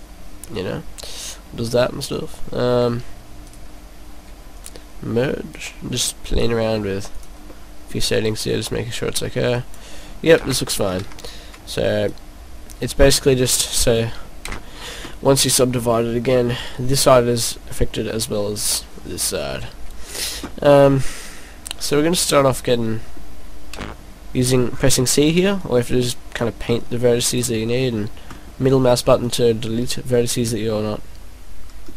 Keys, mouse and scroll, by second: 3.5 right click, 4.5 click, 5.5 right click, 5.7 right click, 7.2 click, 7.5 middle click, 8.4 click, 10.4 ctrl+z, 11.1 ctrl+z, 12.2 right click, 12.2 right click, 13.7 click, 14.4 ctrl+z, 14.7 scroll up 4, 15.1 middle click, 15.7 scroll down 2, 15.9 middle click, 20.9 scroll down 1, 21.1 middle click, 23.7 c, 29.4 right click, 29.4 middle click.